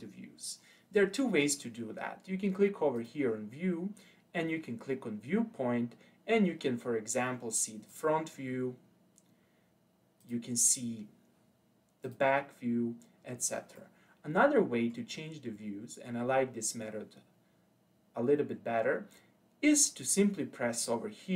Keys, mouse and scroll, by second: 0.7-3.0 scroll down 1, 3.0-6.1 drag, 10.2-13.3 drag, 13.8-16.9 middle drag, 20.7 click.